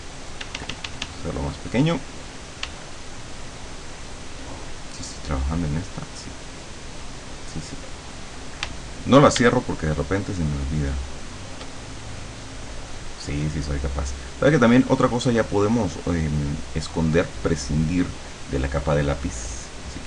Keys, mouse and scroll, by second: 0.4 d, 2.7 d, 4.9 click, 5.6 click, 8.7 d, 9.7-11.7 shift+drag, 17.7 click.